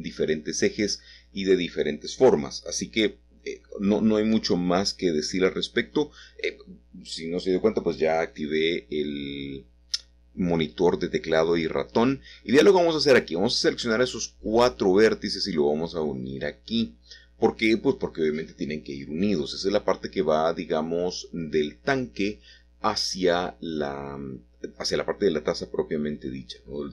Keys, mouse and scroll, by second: 0.4-3.1 middle drag, 3.6-6.9 drag, 4.2-7.9 shift+middle drag, 8.9 middle click, 9.0 click, 10.0 shift+click, 10.5 shift+click, 11.3 shift+click, 12.8 F3, 13.3 b, 13.4 r, 15.5 Delete, 17.7 Return, 21.6 middle click, 26.2-26.9 middle drag.